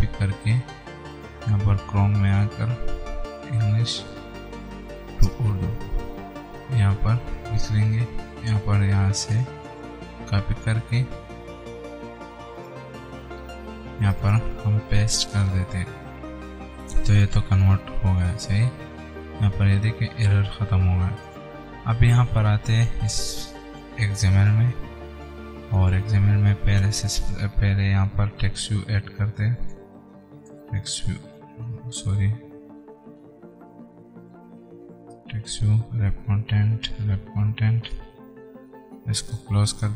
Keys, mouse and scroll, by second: 1.4 click, 3.4-4.8 typing, 5.1 Right, 5.6 Return, 6.4 click, 6.9 ctrl+a, 7.2 ctrl+v, 10.1 click, 12.8 click, 15.4 ctrl+v, 17.9 click, 21.6 click.